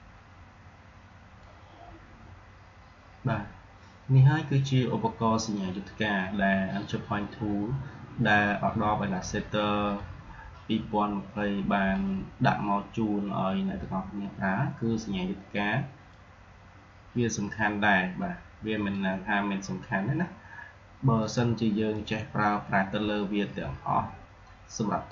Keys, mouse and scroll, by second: 9.9-14.4 drag, 16.0-21.1 drag, 21.1 click.